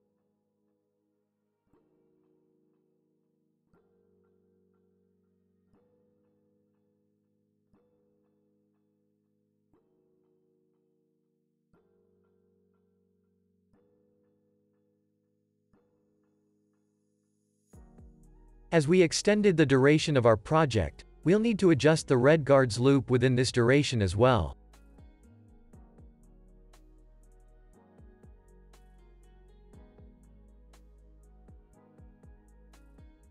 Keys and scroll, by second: 2.2 n, 3.3 super+s, 5.1 space, 16.4 space, 20.3 v, 27.7 n, 28.2 super+s.